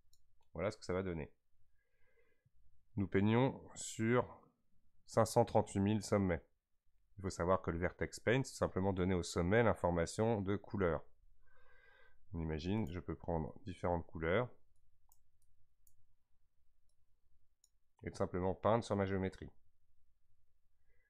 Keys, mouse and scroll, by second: 6.6-9.6 scroll up 1, 12.8 click, 17.0-20.0 drag.